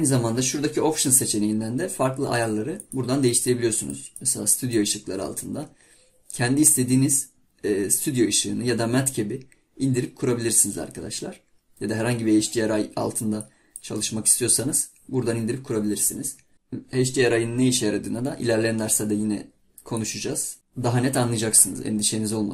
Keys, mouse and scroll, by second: 3.0 click.